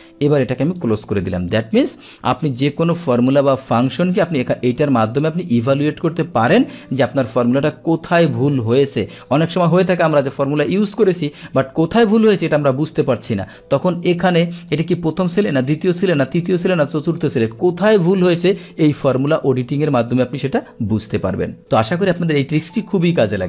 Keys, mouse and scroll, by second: 0.8-1.8 drag, 4.9 click, 16.4 click.